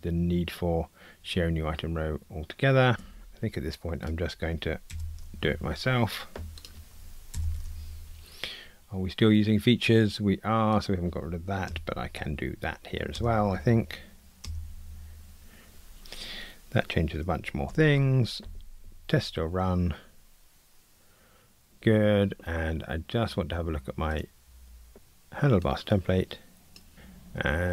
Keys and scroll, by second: 2.9 super+BackSpace, 3.0 Escape, 6.6 super+BackSpace, 11.7 alt+Return, 17.7 ctrl+r.